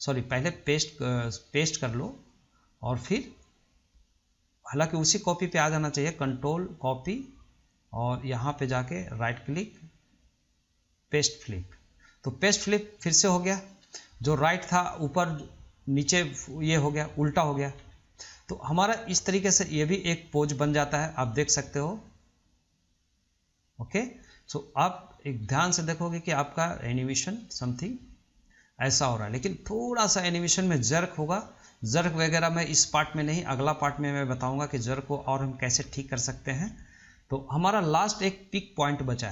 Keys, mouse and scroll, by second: 3.8-5.6 drag, 5.8-7.8 right drag, 7.8-9.5 drag, 9.8-14.0 right drag, 14.0-17.1 middle drag, 18.2-19.8 shift+middle drag, 19.8-22.8 drag, 25.6-25.9 middle drag, 25.9-26.3 scroll up 1, 26.3-27.4 shift+middle drag, 27.4-29.6 drag, 29.6-30.1 scroll down 1, 30.1-33.0 middle drag, 33.0-33.5 scroll up 2, 33.5-34.1 middle drag, 34.1-34.9 scroll down 2, 34.9-35.7 shift+middle drag, 35.7-36.2 scroll up 1, 36.2-39.3 shift+middle drag.